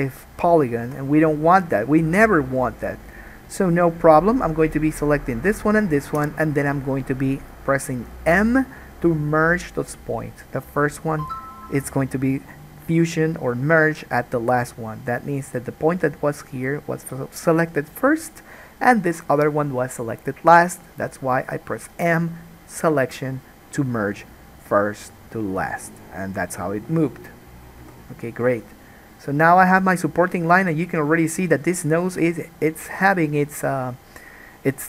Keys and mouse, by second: 1.0 alt+a, 3.9 click, 6.3 m, 28.0 g, 29.7-34.8 alt+middle drag, 29.9 alt+a.